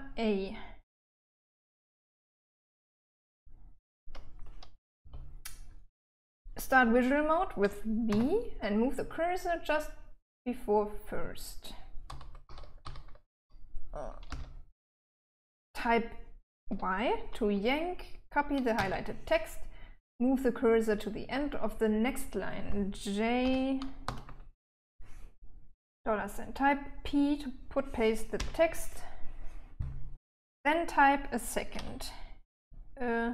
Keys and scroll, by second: 2.4 b, 2.7 b, 2.9 b, 5.3 h, 8.4 v, 12.4 e, 12.7 e, 13.1 e, 14.6 l, 19.1 y, 23.7-24.4 typing, 28.7 typing, 32.0-33.3 typing.